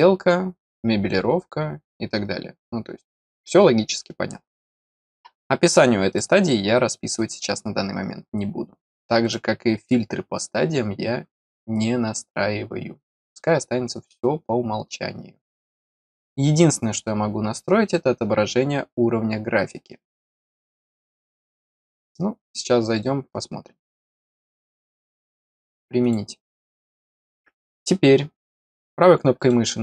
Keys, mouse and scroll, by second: 6.0 click, 9.2 click, 13.2 click, 24.1 click, 26.0 click, 29.3 right click.